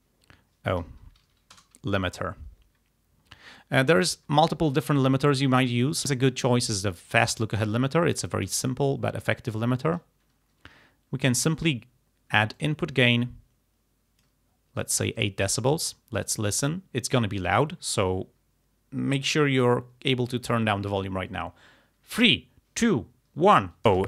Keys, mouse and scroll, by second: 1.0 BackSpace, 1.6 BackSpace, 2.0 End, 7.1 click, 8.5 click, 12.6-14.5 drag, 23.9 space.